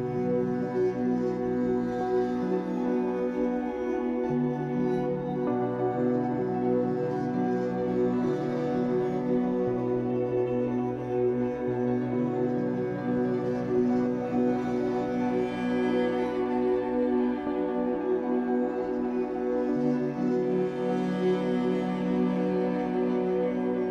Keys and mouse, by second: 0.0 shift+click, 1.3 space, 4.4 space, 9.0 click, 10.3 click, 13.2 click, 18.1 click, 19.2 click, 21.0 click.